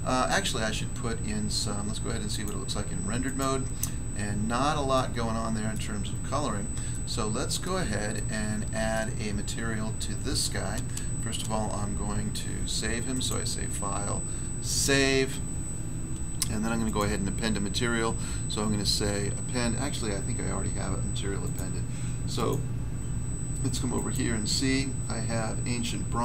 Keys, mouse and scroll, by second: 0.2 middle click, 2.2 click, 2.4 click, 3.2 click, 3.3 click, 4.9 middle click, 5.7 middle click, 6.9 middle click, 8.1 middle click, 13.1 click, 13.2 click, 14.6 click, 14.7 click, 16.8 click, 16.9 click, 21.3 click, 21.5 click, 22.3 click, 22.4 click, 23.9 click, 24.1 click, 26.1 click.